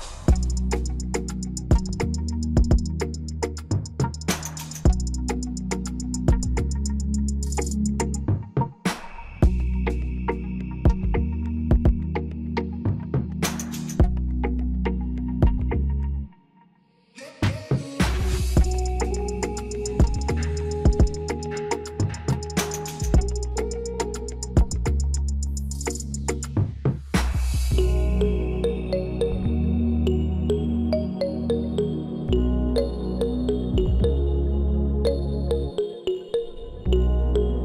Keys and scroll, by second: 0.1 0, 1.2 Return, 2.4 3, 3.2 -, 30.0 ctrl+].